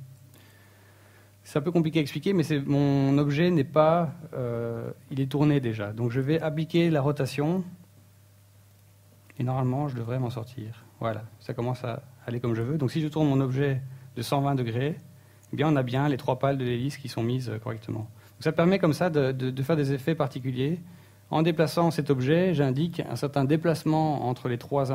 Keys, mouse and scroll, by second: 1.5 n, 3.8 click, 4.2 click, 6.8 right click, 7.1 r, 12.5 z, 12.8-13.1 scroll up 1, 13.1 middle click, 15.0 r, 15.9 right click, 16.2 middle click, 16.6-17.1 scroll down 4, 17.1 g, 19.6 right click.